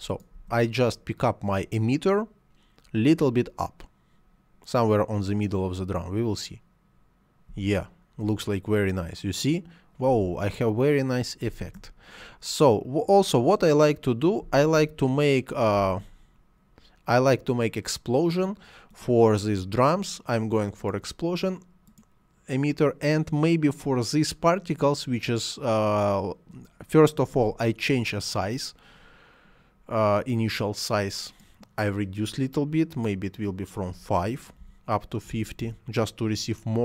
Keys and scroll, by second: 7.4 space, 9.9 space, 14.3 space, 33.7 5, 35.4 Return.